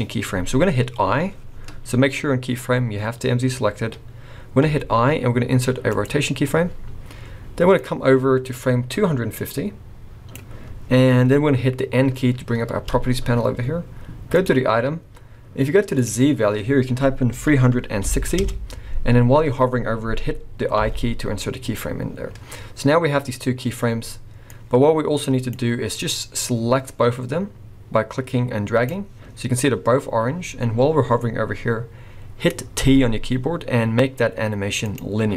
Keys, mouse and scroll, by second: 4.6 i, 7.8 click, 12.8 n, 14.4 click, 16.0 click, 20.8 i, 22.8-23.6 scroll down 4, 24.5 click, 25.9 click, 32.8 t.